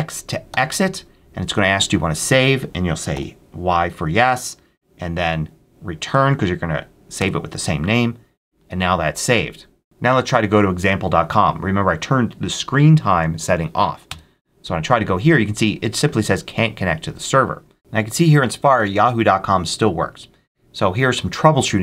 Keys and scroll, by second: 4.0 y, 7.1 Return, 13.9 Return.